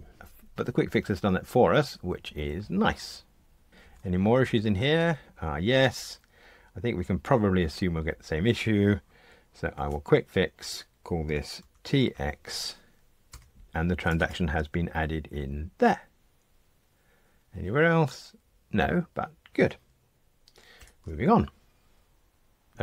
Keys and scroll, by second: 3.8 F2, 9.9 F1, 20.8 super+F9.